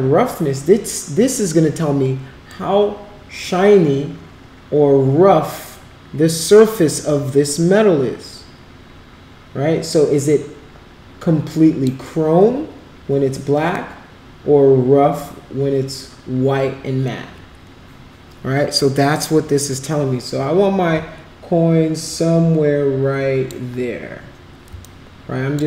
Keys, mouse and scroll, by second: 2.5-11.9 drag, 13.7-23.5 drag, 24.9 alt+click.